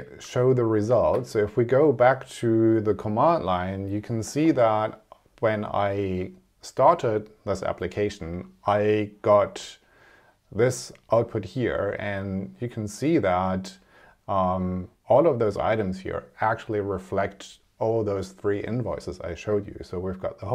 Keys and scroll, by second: 0.2 super+Tab.